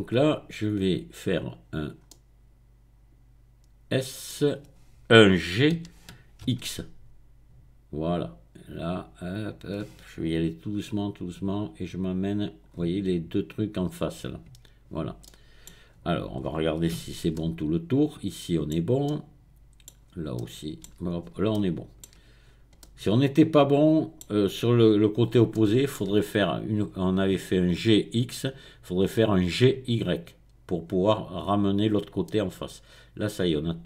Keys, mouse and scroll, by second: 0.3-1.3 scroll up 2, 1.3 scroll up 1, 2.1-4.6 middle drag, 5.9 g, 6.5 x, 12.4 click, 15.2 middle click, 15.8-16.4 scroll down 1, 16.4-17.3 scroll up 1, 17.1 Tab, 19.9-20.3 scroll down 1, 20.3 middle click, 21.2 shift+middle click, 22.4-22.8 scroll down 1, 24.4-25.3 scroll up 1, 25.5-26.9 shift+middle drag, 30.0-30.8 scroll up 1, 30.8-31.6 scroll down 1, 32.3-33.8 middle drag.